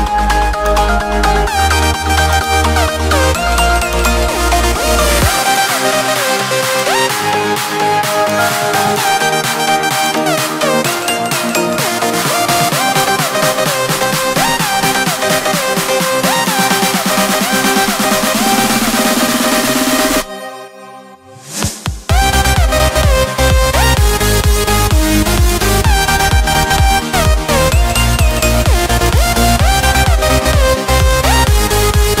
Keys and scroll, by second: 19.0 ctrl+d.